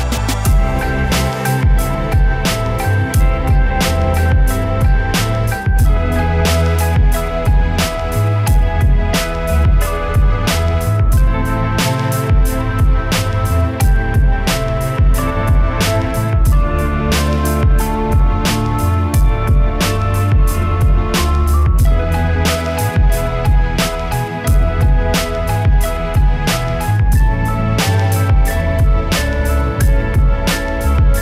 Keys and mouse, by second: 0.3 s, 0.9 click, 1.4 middle click, 2.2 KP_1, 2.5 Tab, 2.7 z, 2.7 a, 3.4 x, 3.7 click, 4.6 click, 4.8 a, 5.2 ctrl+z, 5.8 s, 6.0 click, 6.5 ctrl+r, 7.1 click, 7.5 z, 7.7 s, 7.8 click, 8.7 s, 8.9 click, 9.8 KP_3, 10.3 e, 10.6 s, 11.3 click, 11.9 click, 12.1 right click, 12.8 KP_1, 13.1 e, 13.3 s, 13.7 s, 14.8 s, 15.4 s, 16.7 click, 16.8 KP_1, 17.0 e, 17.3 click, 18.0 e, 18.2 click, 18.4 s, 19.0 click, 20.1 middle click, 20.2 click, 20.2 right click, 20.5 shift+e, 21.3 click, 22.3 right click, 22.4 shift+e, 23.5 right click, 23.7 f, 24.1 ctrl+z, 25.0 shift+e, 25.2 click, 25.5 right click, 25.9 shift+e, 26.0 click, 26.4 middle click, 26.5 right click, 26.7 shift+e, 26.8 click, 27.3 right click, 27.5 middle click, 27.7 middle click, 28.4 ctrl+z, 28.7 shift+e, 28.9 click, 29.0 middle click, 29.1 middle click, 29.3 right click, 29.4 click, 29.4 middle click, 30.0 right click, 30.3 shift+e, 30.8 Tab.